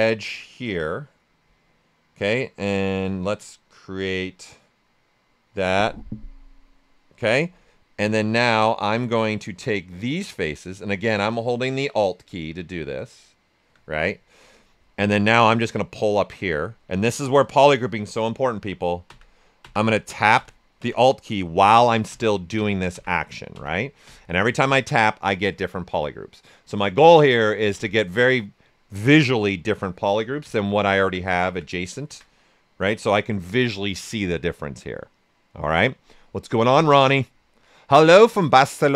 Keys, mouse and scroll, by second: 8.2-15.6 alt+drag, 15.4 typing, 15.6-25.6 drag.